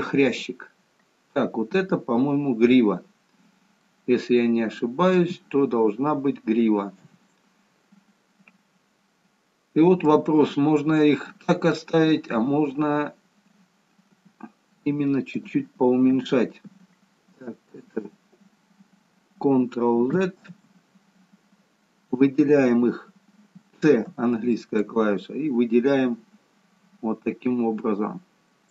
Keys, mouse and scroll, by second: 3.9 middle click, 7.2 KP_3, 10.9 click, 14.1 g, 20.6 ctrl+z, 24.2 c.